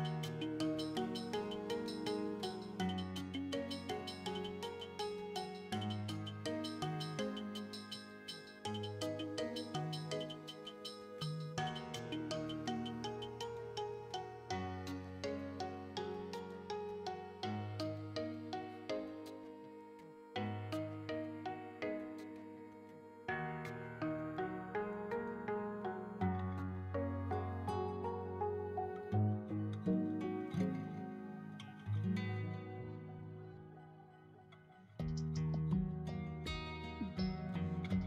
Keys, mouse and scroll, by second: 0.4 shift+middle click, 0.4 scroll down 2, 0.9 middle click, 1.7 e, 1.7 z, 2.5 right click, 2.8 middle click, 3.0-5.6 typing, 3.5 middle click, 3.6-4.1 scroll down 3, 4.5 click, 4.6 shift+middle click, 6.1 click, 6.2 middle click, 6.5 shift+middle click, 6.6 scroll up 2, 6.8 middle click, 6.9 shift+middle click, 7.3 shift+middle click, 7.5 scroll up 1, 7.6 middle click, 12.9 right click, 13.2 alt+right click, 13.6 e, 13.9 z, 15.6 click, 15.8 s, 15.9 shift+z, 16.8 click, 16.9 shift+middle click, 17.6 click, 18.3 e, 18.5 z, 19.7 click, 19.7 s, 19.8 shift+middle click, 20.0 e, 20.1 z, 20.6 click, 20.8 shift+middle click, 20.9 middle click, 21.2 shift+middle click, 21.4 middle click, 22.0 e, 22.7 z, 22.9 click, 22.9 middle click, 23.4 s, 23.9 click, 24.0 shift+middle click, 24.3 scroll down 2, 24.4 shift+middle click, 24.5 middle click, 24.7 e, 24.9 z, 25.5 click, 25.6 s, 26.0 click, 26.0 shift+right click, 26.1 shift+middle click, 26.4 alt+right click, 26.6 middle click, 26.7 e, 26.8 z, 27.1 click, 27.1 s, 27.6 click, 27.7-28.1 scroll up 3, 27.9 middle click, 28.2 middle click, 28.4 space, 29.6 middle click, 29.7 shift+middle click, 29.9 scroll down 2, 30.0 middle click, 30.1 scroll up 1, 30.2 middle click, 30.9 shift+middle click, 31.1 middle click, 31.6 alt+right click, 32.6 ctrl+b, 34.8 click, 35.0 scroll up 3, 35.1 middle click, 35.3-35.6 scroll down 2, 35.4 alt+right click, 35.9 ctrl+b, 36.5 shift+middle click, 36.9 click, 37.1 alt+right click, 37.4 alt+shift+right click, 37.6 alt+shift+right click.